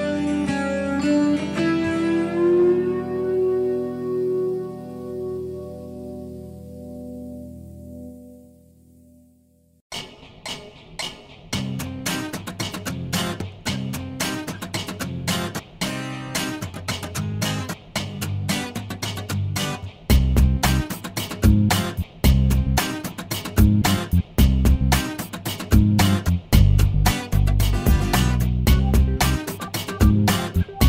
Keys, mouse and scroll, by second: 0.3 click, 1.1 click, 2.6 click, 3.1 click, 3.8 shift+o, 4.3 shift+scroll down 1, 4.6 shift+middle click, 5.1 scroll down 1, 5.3 middle click, 6.5-7.8 middle drag, 7.9-8.3 scroll up 1, 8.5 middle click, 10.4 click, 13.6 click, 14.3 click, 14.6 middle click, 16.7 click, 18.3 click, 18.8 middle click, 21.6 click, 22.3 click, 22.8 middle click, 24.8 click, 25.8 click, 26.3 middle click, 28.8 click, 29.3 click, 29.7 middle click, 30.6 middle click.